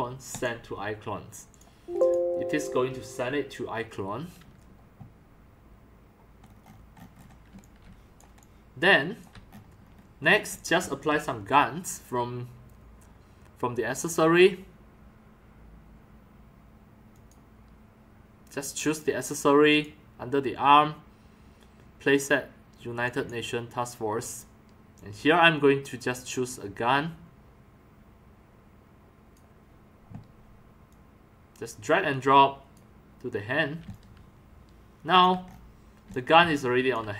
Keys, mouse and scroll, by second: 3.1 right click, 6.7-7.3 scroll up 2, 7.5 x, 7.6-8.2 drag, 7.8 c, 8.4-9.2 drag, 9.8 scroll up 1, 10.5 x, 11.0 c, 17.1 click, 18.9 click, 23.0 click, 24.2 click, 24.9-29.3 drag, 29.7 drag, 30.9-32.7 drag, 33.9-34.2 alt+drag, 35.4 scroll up 4, 36.6 click.